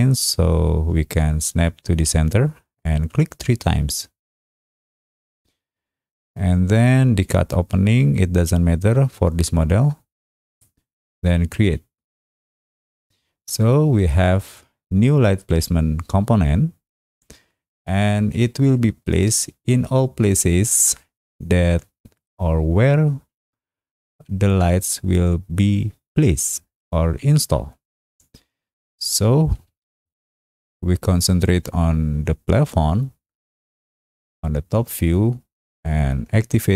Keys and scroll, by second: 18.6 t.